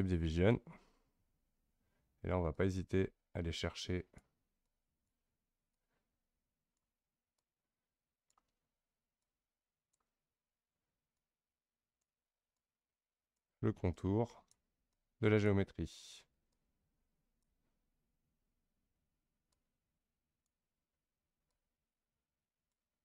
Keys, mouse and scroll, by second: 0.7 scroll down 2, 2.5-23.0 drag.